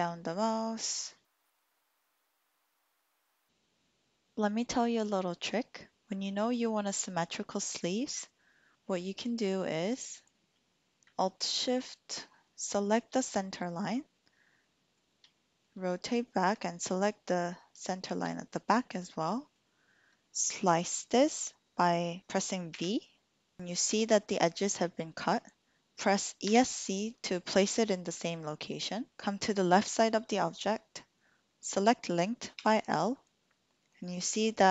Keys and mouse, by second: 3.3 typing, 12.6 alt+shift+click, 14.1 click, 15.3 shift+click, 15.8 click, 17.6 alt+shift+click, 18.7 click, 22.7 v, 26.4 Escape, 26.4 typing, 32.6 l, 34.4-34.7 middle drag.